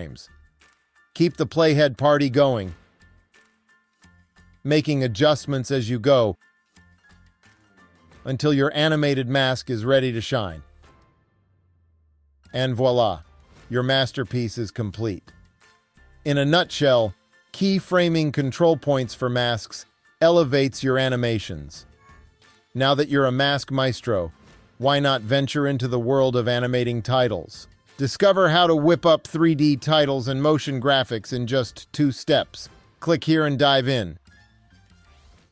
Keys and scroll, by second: 0.1 Right, 4.4 Right, 6.3 Right, 9.9 Right, 11.7 Right.